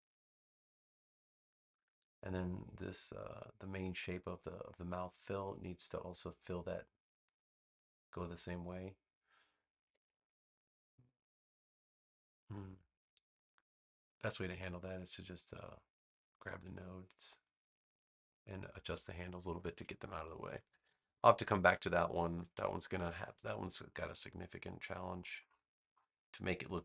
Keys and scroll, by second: 20.6 super+-, 22.4 super+=, 23.5 space.